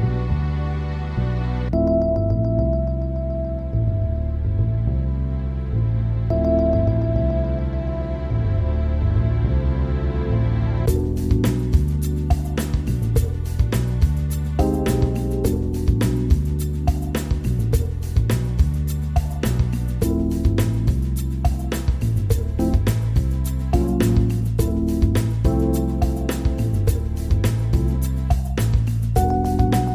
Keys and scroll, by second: 15.8 ctrl+g, 16.8 ctrl+z, 19.9 ctrl+g.